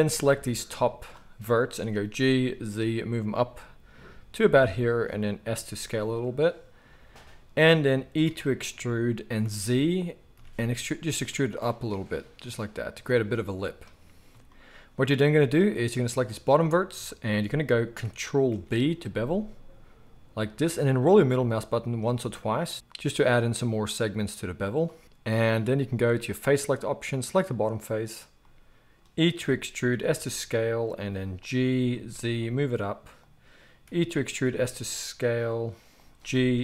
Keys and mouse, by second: 0.4-5.2 drag, 1.9 g, 5.2-15.9 middle drag, 5.5 s, 8.2 e, 15.9-24.8 drag, 18.5 ctrl+b, 24.8-26.7 middle drag, 26.7 click, 27.4-36.6 middle drag, 29.3 e, 31.5 g, 33.8 e, 36.2 g.